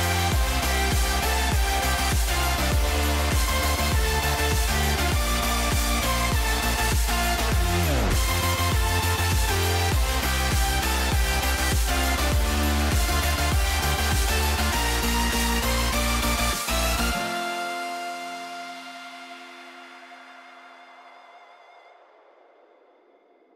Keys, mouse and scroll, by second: 2.3 middle click, 2.7 middle click, 3.0 middle click, 3.3 middle click, 3.8 middle click, 4.3 shift+middle click, 5.0 shift+middle click, 5.6 shift+middle click, 7.0 shift+middle click, 7.6-9.2 drag, 9.8-11.5 drag, 11.9 Tab, 13.0 shift+middle click, 13.2 middle click, 13.5 ctrl+s, 17.0 shift+middle click, 18.2-18.5 middle drag, 19.8 shift+middle drag.